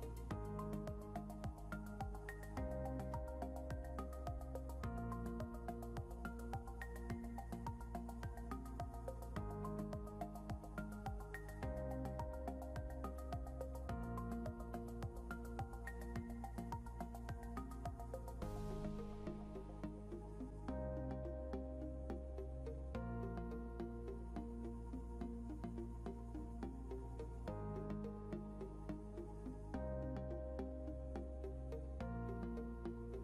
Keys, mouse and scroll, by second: 0.8 scroll down 1, 2.7 click, 9.0 F4, 10.3 click, 12.1 scroll up 1, 12.8 click, 14.8 click.